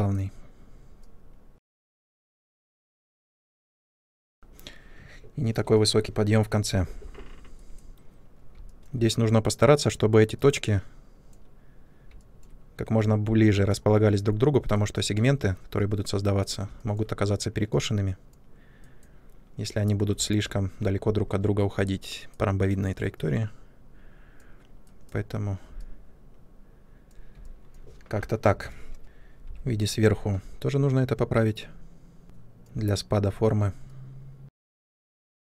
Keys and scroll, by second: 29.0 ctrl+space, 29.3 3.